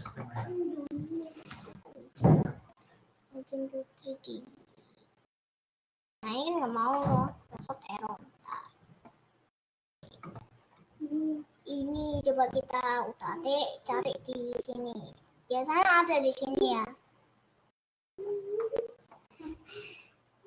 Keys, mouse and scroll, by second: 0.8 scroll down 1, 8.6 middle click, 9.3-10.0 scroll up 3, 10.0 scroll down 4, 10.2 middle click, 10.8 scroll up 2, 18.7 middle click, 19.4 scroll up 3, 19.7-20.4 scroll down 2.